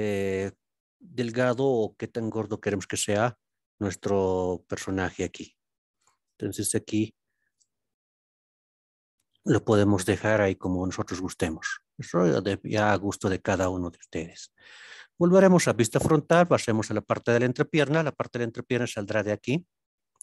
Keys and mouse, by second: 8.3 KP_Decimal, 8.5 KP_6, 10.4-12.1 middle drag, 14.3 alt+z, 14.7 KP_1, 16.5-17.5 middle drag, 18.1 4, 18.6 click.